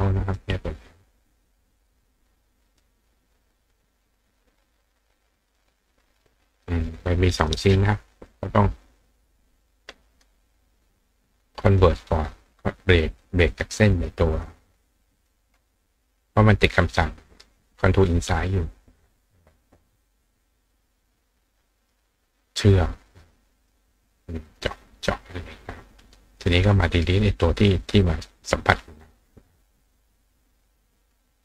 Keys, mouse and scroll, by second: 1.9 click, 2.7 click, 5.4 click, 6.5 click, 7.4 click, 11.7 click, 12.9 click, 13.5 click, 14.0 click, 15.2 shift+click, 23.6 click, 24.5 click, 25.4 click, 26.4 click, 29.9 click.